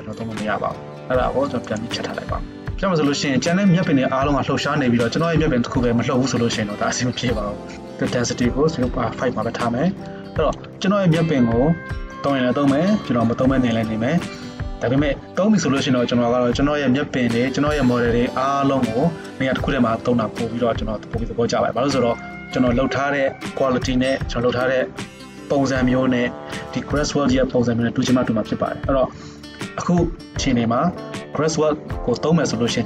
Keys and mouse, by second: 2.0 middle click, 2.7-32.8 shift+drag.